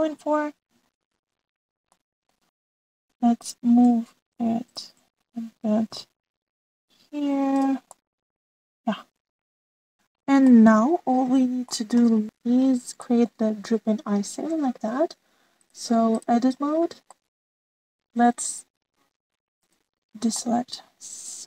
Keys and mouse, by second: 0.3-0.7 middle drag, 2.8-3.7 shift+middle drag, 6.4 g, 9.0-9.9 middle drag, 11.0-11.6 middle drag, 12.1 shift+middle click, 13.0 click, 13.6 middle click, 14.0 shift+middle click, 16.5-17.2 drag, 17.6 middle click, 18.1 middle click, 19.5 click, 20.5 click, 21.3-21.4 middle drag.